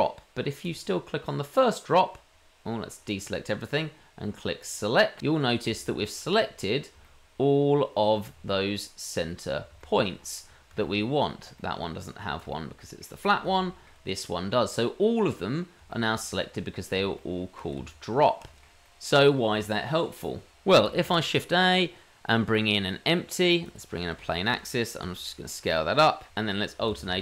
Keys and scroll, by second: 17.8 Tab, 21.0 shift+a, 25.0 s, 26.3 shift+a, 27.0 alt+a.